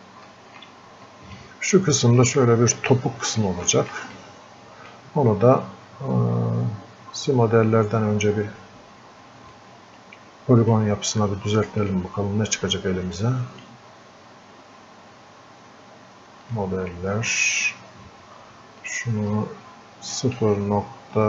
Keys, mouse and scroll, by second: 0.3 alt+click, 3.7 alt+click, 4.2-9.5 drag, 9.5-16.5 drag, 18.8 click.